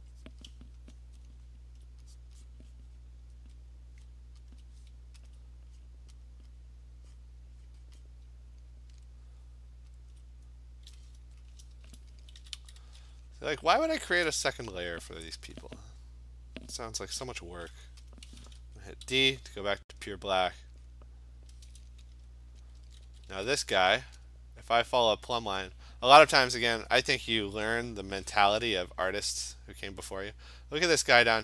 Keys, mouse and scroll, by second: 0.0 click, 0.3 click, 0.6 click, 2.2 click, 2.4 click, 2.5 click, 3.0 click, 3.5 click, 4.6 alt+click, 4.7 alt+click, 5.4 click, 5.5 alt+click, 5.9 click, 6.3 click, 6.6 click, 7.2 click, 7.7 click, 8.1 click, 8.5 alt+click, 10.2 alt+click, 11.6 click, 11.8 [, 12.4 [, 12.6 [, 12.8 [, 13.4 click, 13.9 click, 14.1 alt+click, 14.2 click, 15.2 alt+click, 17.2 d, 18.2 click, 19.1 d, 20.1 click, 20.5 click, 20.8 click, 22.8 [, 23.0 [, 23.3 [.